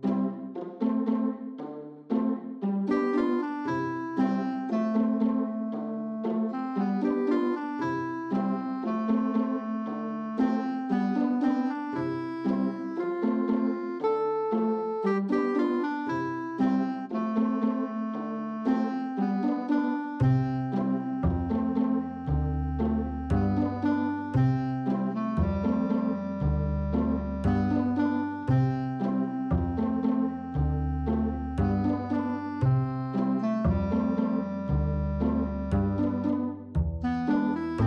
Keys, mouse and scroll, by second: 3.6 g, 5.7-6.1 shift+middle drag, 6.2-9.1 middle drag, 9.4 click, 10.0 Tab, 11.6 q, 12.5-14.5 middle drag, 14.9 shift+middle click, 15.2 middle click, 15.7 shift+middle click, 16.0-16.5 middle drag, 16.5 shift+middle click, 17.0 middle click, 18.2 ctrl+z, 18.7 ctrl+z, 19.4 shift+middle drag, 20.3 shift+middle click, 20.7 middle click, 21.7 q, 22.9 shift+middle click, 23.2 middle click, 25.5 Tab, 29.8 click, 33.3 shift+middle click, 33.9 shift+middle click, 34.5 middle click, 35.8 f, 35.9 click, 36.2 click, 36.4 shift+middle click, 36.7 click, 36.9 middle click, 36.9 click, 37.2 click, 37.3 middle click, 37.5 middle click, 37.6 g, 37.7 click, 37.8 middle click.